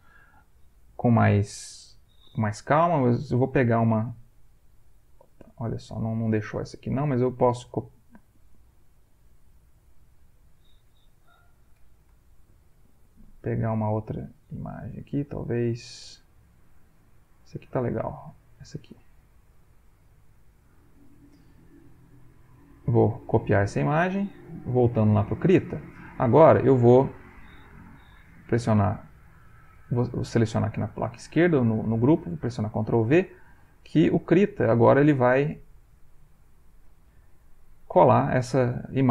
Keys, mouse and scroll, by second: 1.8 click, 5.9 click, 6.7 right click, 9.3 click, 9.8 click, 11.3 alt+Left, 12.4 click, 17.1 click, 18.3 click, 19.5 click, 22.2 right click, 23.2 click, 23.8 alt+Tab, 24.8 alt+Tab, 29.6 click, 32.2 ctrl+v.